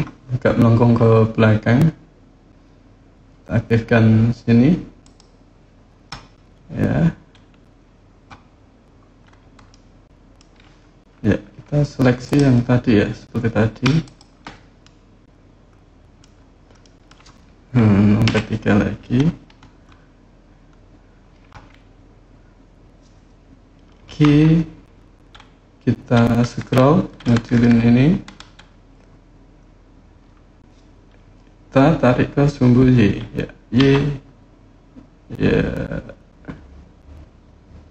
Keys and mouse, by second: 4.8 click, 9.5 middle click, 12.0 click, 13.8 shift+click, 14.7-16.0 middle drag, 16.6 middle click, 18.0 KP_3, 23.8 g, 33.5 y.